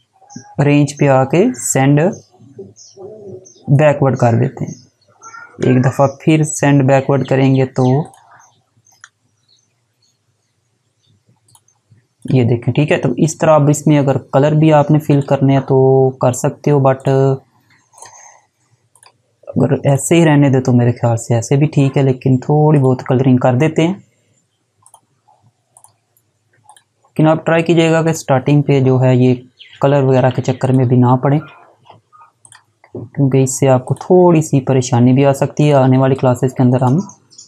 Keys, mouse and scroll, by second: 2.9 click, 4.7 right click, 7.3 click, 8.2 right click, 10.7 click, 14.4 click, 21.9 click, 29.9 click, 32.8 z, 33.1 click.